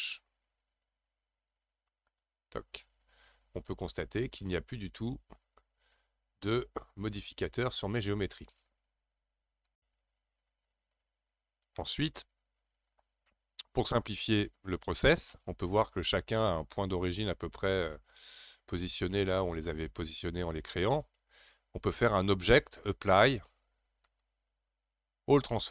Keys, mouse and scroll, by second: 11.8-14.8 middle drag, 22.3-25.5 drag.